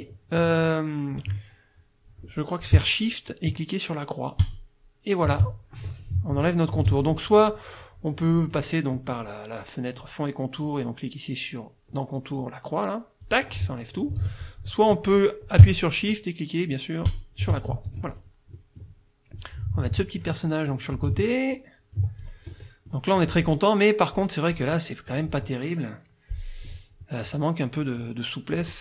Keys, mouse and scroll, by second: 4.4 shift+click, 6.9 ctrl+z, 13.2 click, 14.2 ctrl+z, 17.1 shift+click, 17.9 shift+F1, 18.1 shift+click, 18.6 shift+click, 19.4-20.4 drag, 20.7-22.2 drag, 22.2 ctrl+click, 22.6 ctrl+middle click, 24.2 click, 24.5 click, 25.1 click, 27.3 click, 28.5 click.